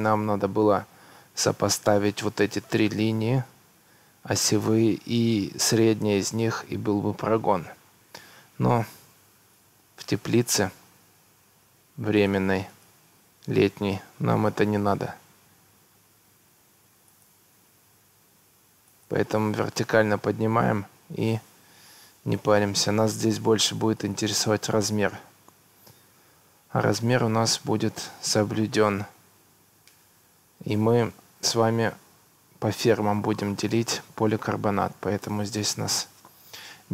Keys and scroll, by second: 11.0 Escape, 19.3 Escape.